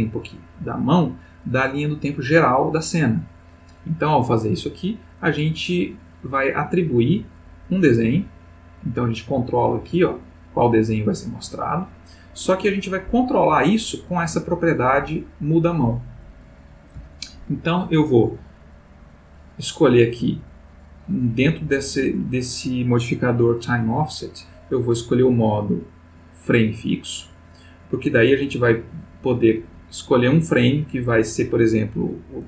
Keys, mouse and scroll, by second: 7.4-13.1 drag, 12.4 Escape, 14.2 click, 16.3 click, 18.4 click, 24.9 click, 25.9 click, 27.9-29.9 drag, 30.4 click, 31.2 click.